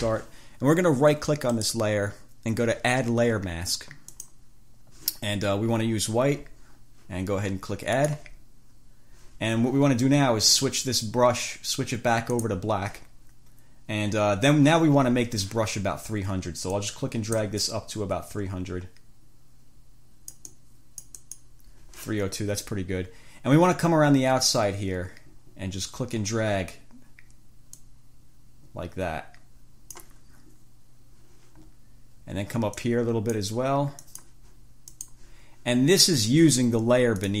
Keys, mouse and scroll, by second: 1.7 right click, 4.3 click, 8.1 click, 12.5 click, 16.9 click, 28.0-30.4 drag, 33.0 click, 34.2 click, 35.1 click.